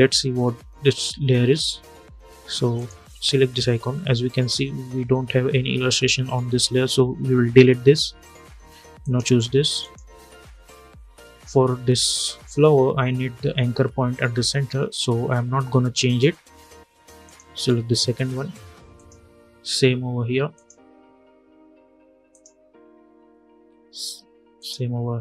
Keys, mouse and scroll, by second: 2.4 click, 8.7 click, 11.6-12.1 scroll up 1, 16.9 click, 24.3 click.